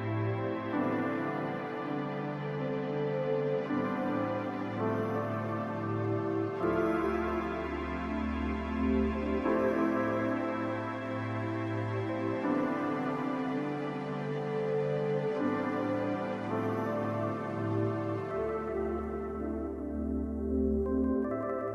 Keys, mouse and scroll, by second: 1.1-1.7 ctrl+scroll down 1, 2.3-2.7 scroll up 1, 7.7 ctrl+scroll up 1, 10.2-11.2 shift+scroll down 1, 12.2-13.5 shift+scroll down 3, 13.9-14.5 shift+scroll down 1, 16.8-17.3 ctrl+scroll up 2, 18.3-20.5 scroll up 2, 18.4 alt+s.